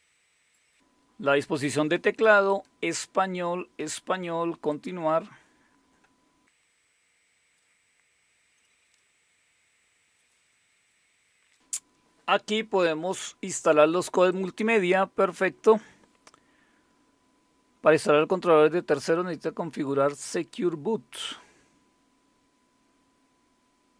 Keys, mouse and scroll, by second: 2.5 click, 4.7 click, 5.4 click, 14.3 click.